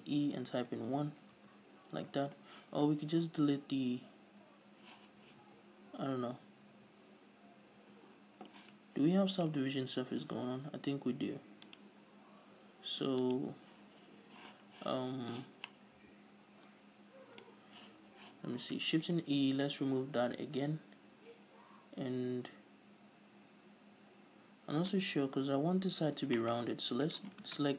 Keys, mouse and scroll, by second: 0.0 shift+e, 1.4 Return, 1.7 Tab, 2.2 scroll down 1, 2.8 scroll up 1, 3.0-9.9 drag, 5.8 Tab, 7.7-8.1 scroll up 1, 8.2 Tab, 12.1 click, 13.6 click, 16.1-25.3 middle drag, 18.8 Tab, 19.6 shift+e, 25.3 right click, 26.8 shift+middle click, 27.4 right click.